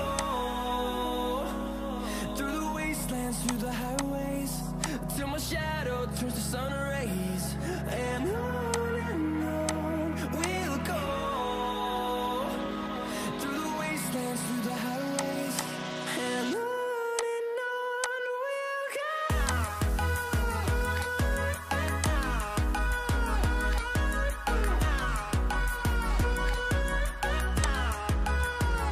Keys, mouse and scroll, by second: 15.5 double click.